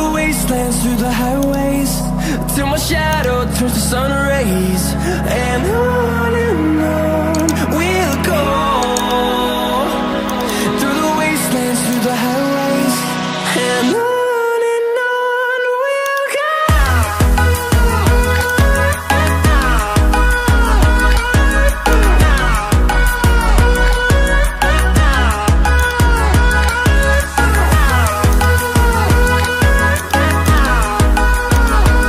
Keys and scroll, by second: 19.6 ctrl+i, 23.0 ctrl+i.